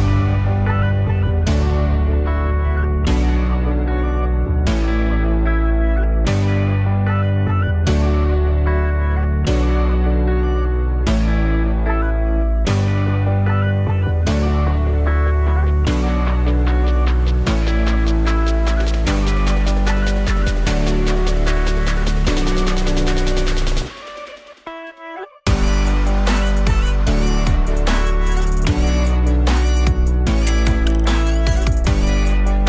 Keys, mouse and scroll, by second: 1.6 scroll down 1, 1.9-2.6 alt+middle drag, 2.6 KP_1, 3.3-3.7 scroll up 1, 3.7-4.4 alt+middle drag, 4.4-4.8 scroll up 2, 4.8-5.3 scroll down 1, 5.3 click, 6.2 Tab, 12.7 Tab, 14.1 click, 17.9 click, 18.2 Tab, 19.9 click, 20.2 alt+shift+click, 20.3 alt+shift+click, 22.0 alt+shift+click, 22.4 alt+shift+click, 22.8 alt+shift+click, 23.3 alt+shift+click, 23.8 alt+shift+click, 24.2 alt+shift+click, 26.3 alt+click, 27.2-28.1 scroll up 1, 28.1 shift+d, 29.6 p, 31.3 click, 31.9 Tab, 32.1 click.